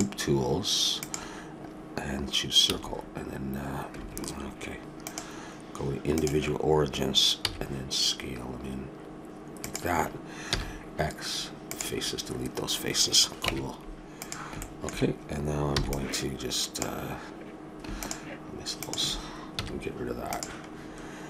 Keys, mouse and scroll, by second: 2.7 s, 5.0-6.9 drag, 7.4 s, 10.5 x, 13.5 ctrl+Tab, 14.6 middle click, 15.8 b, 18.0-20.6 drag, 19.6 x, 20.7-21.2 middle drag.